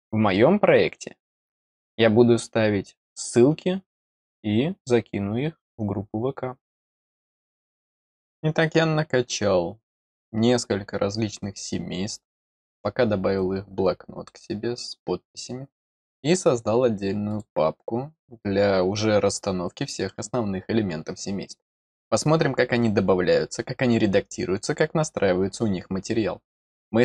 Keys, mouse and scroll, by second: 13.3 click, 17.2 click.